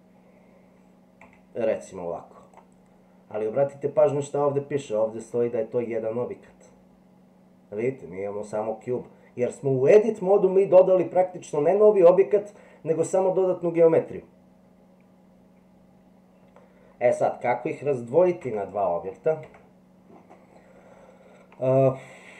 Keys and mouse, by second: 18.4 Tab, 19.4 Tab, 21.8-22.3 middle drag.